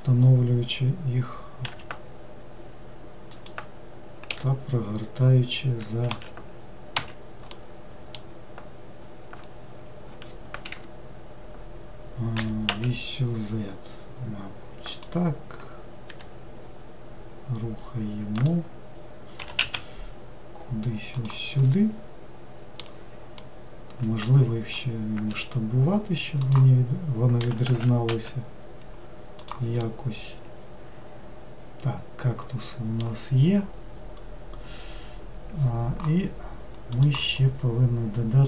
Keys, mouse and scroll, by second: 4.3 r, 6.2 z, 7.6-9.1 middle drag, 9.1-10.8 scroll down 1, 10.8 Escape, 12.4 r, 16.2 g, 19.5 g, 21.7-25.4 middle drag, 25.4 s, 27.5 g, 29.9-33.0 middle drag.